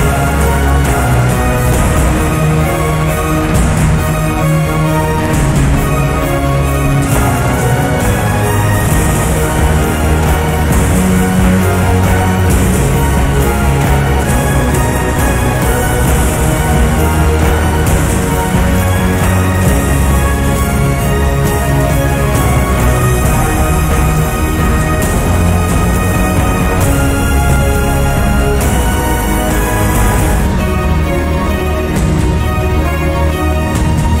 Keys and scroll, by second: 23.3 Return, 23.7 space.